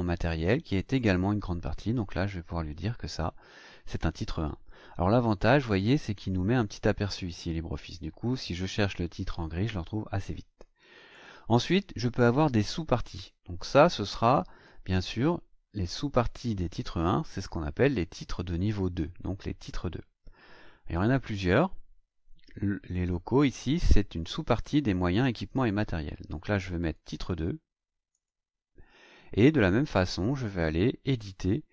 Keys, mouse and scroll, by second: 0.9 click, 3.8 click, 5.6 click, 11.1 click, 21.7-22.0 scroll down 1, 22.9 click, 26.8 click, 28.1 click, 29.9 right click.